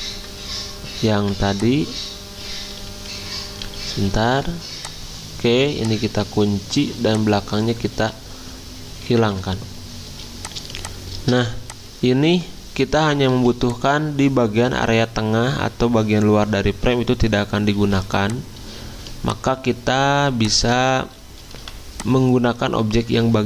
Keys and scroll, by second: 1.2 ctrl+3, 2.6 v, 3.6 ctrl+z, 3.9 ctrl+z, 6.8 ctrl+2, 9.2 ctrl+3, 10.0 z, 11.3-13.3 typing, 17.8 z, 19.1 v.